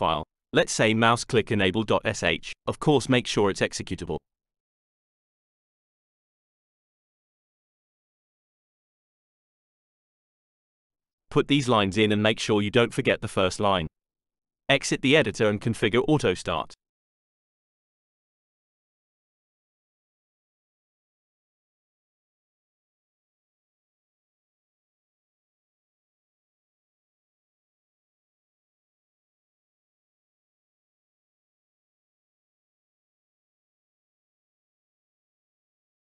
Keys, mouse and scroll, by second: 0.0 click, 0.4 click, 2.6-3.4 scroll up 2, 8.0 Return, 16.3-17.1 typing, 17.4 Return, 20.1-23.4 typing, 24.0 Return, 27.4 click, 31.1-33.6 typing, 35.5 click.